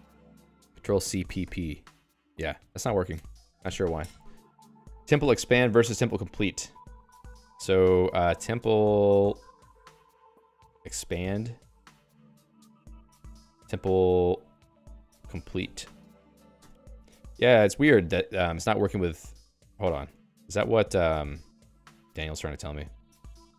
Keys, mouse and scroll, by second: 0.0-0.4 typing, 3.1 Escape, 7.5-9.4 typing, 8.0 alt+x, 10.5-11.7 typing, 12.3 Return, 13.1 alt+x, 14.1-15.6 typing, 16.3 ctrl+j, 16.6 Return, 19.6 Escape, 20.2 ctrl+g, 20.5 ctrl+g, 21.3 ctrl+alt+j, 23.3 ctrl+j, 23.4 Return.